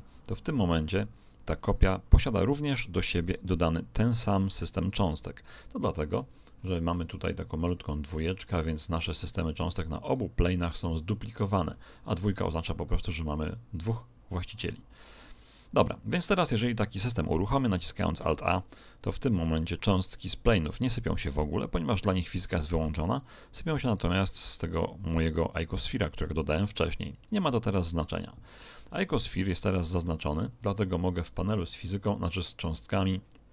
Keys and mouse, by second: 0.1 shift+d, 6.2-8.9 middle drag, 10.0-14.7 right drag, 18.2 alt+a, 23.8 right click, 32.4 click.